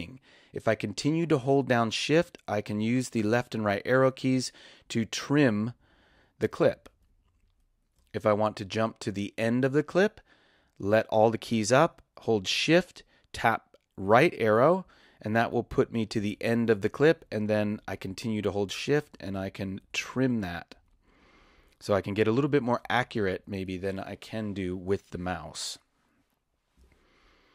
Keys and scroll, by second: 2.1 shift+Left, 2.9 shift+Right, 4.3 shift+Left, 5.2 shift+Right, 14.1 shift+Right, 14.8 shift+Left, 17.2 shift+Right, 19.0 shift+Left, 20.7 shift+Right, 22.0 shift+Left.